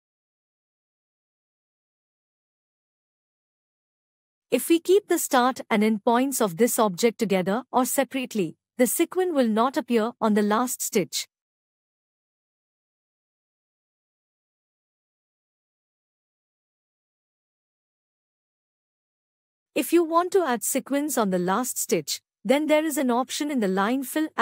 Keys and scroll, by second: 13.3 ctrl+alt+e.